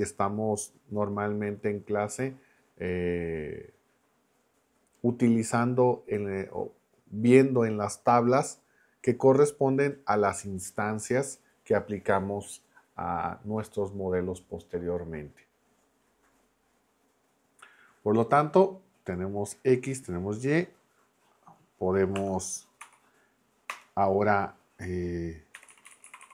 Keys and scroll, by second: 22.1 Escape, 22.8 b, 23.7 Return, 25.3-26.3 typing.